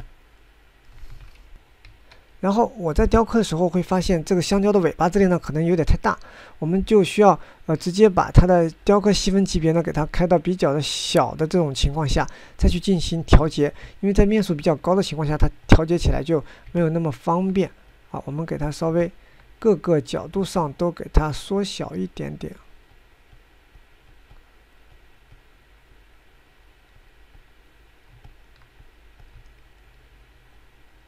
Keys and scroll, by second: 3.0 9, 14.5 g.